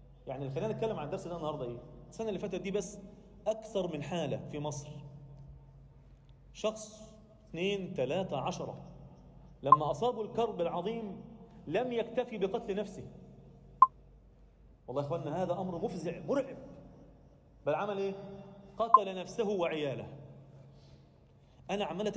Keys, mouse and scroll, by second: 0.0 z, 6.9 Tab, 7.3 Tab, 8.8 shift+d, 14.4-15.2 alt+middle drag, 15.5-15.8 scroll up 1, 15.9 shift+middle click, 17.3-17.7 drag, 18.3 click, 18.6-18.9 scroll down 1, 19.3 scroll up 2, 19.8 Tab, 20.2 alt+shift+middle click, 20.6 alt+middle click, 21.6-22.1 scroll up 1.